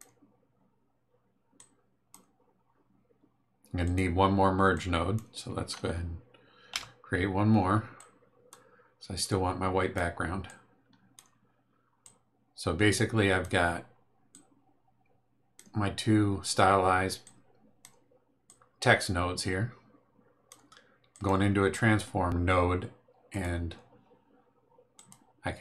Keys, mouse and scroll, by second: 1.5 click, 3.8 click, 4.7 click, 6.7 m, 7.9 click, 9.2 click, 10.4 click, 12.0-13.6 drag, 14.3-15.7 drag, 17.2 click, 18.4-20.7 drag, 21.1 click, 23.3 click, 24.9 click.